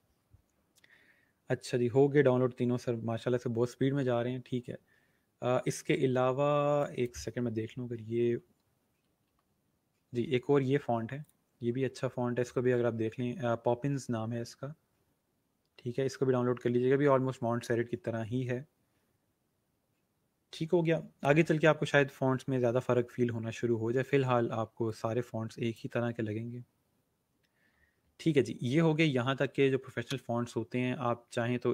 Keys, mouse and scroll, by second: 0.4-0.8 scroll up 1, 3.2 scroll up 1, 6.7 click, 8.2-9.7 typing, 11.2 click, 12.6 scroll down 1, 13.2 scroll up 1, 14.3 scroll down 1, 17.7 scroll up 1, 24.8 click, 25.9 scroll down 1, 27.7 scroll up 1.